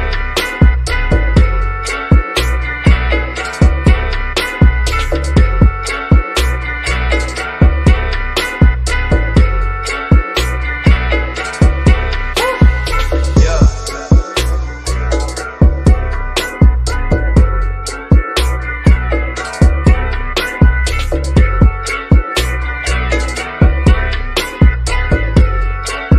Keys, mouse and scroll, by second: 3.6 click, 5.2-5.6 scroll up 1, 8.9 click, 12.0 Escape, 13.3 click, 17.4 Escape, 18.7-20.9 shift+middle drag, 20.9 click, 22.9 click, 25.6 shift+middle click.